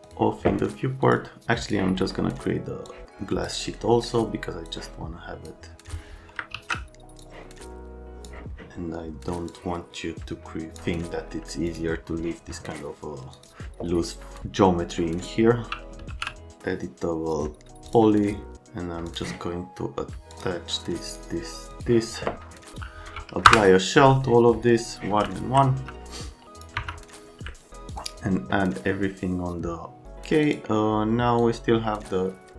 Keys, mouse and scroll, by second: 0.0 click, 1.1 click, 1.6 click, 2.0 right click, 2.9 click, 3.7 right click, 4.6 click, 6.5 ctrl+z, 7.2 click, 9.5 click, 11.3 middle click, 11.7 right click, 13.3 click, 15.7-16.7 typing, 17.9 click, 19.0 click, 20.3 click, 21.1 click, 21.7 click, 23.5 Return, 25.3 alt+middle click, 25.8 F3, 26.4 click, 26.8 F3, 27.5 alt+middle click, 27.9 click, 30.4 click, 31.4 click.